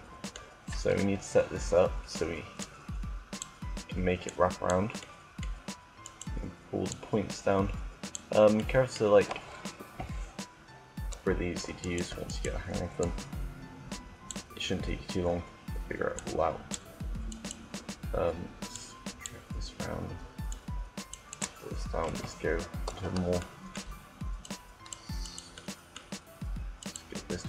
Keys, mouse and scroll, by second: 2.3-4.7 drag, 4.7-5.8 middle drag, 5.9 right click, 6.5-7.5 drag, 6.6-8.2 right drag, 9.4 KP_7, 11.4-13.7 right drag, 12.7-14.1 drag, 14.2 click, 15.8 click, 17.1-19.1 drag, 17.3-19.0 right drag, 19.2-20.3 drag, 20.3-21.9 right drag, 21.7 KP_1, 24.1-25.5 right drag, 27.2 click, 27.2 right click.